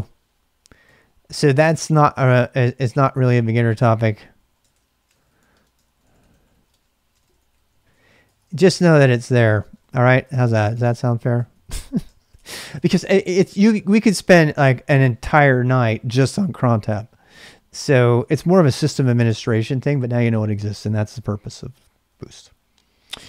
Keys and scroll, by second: 0.0-13.2 typing, 18.7-19.7 typing, 22.2 super+Tab.